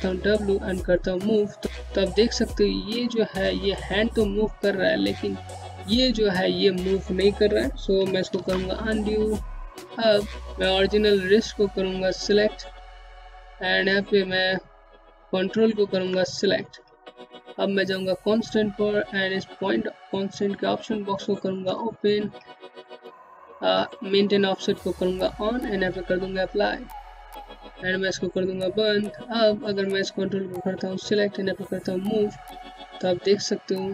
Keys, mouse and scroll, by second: 6.7 ctrl+z, 8.3 click, 9.9 scroll up 1, 11.4-12.4 scroll up 1, 12.4-14.6 scroll down 1, 15.3 ctrl+click, 17.9 click, 21.9 click, 23.2 click.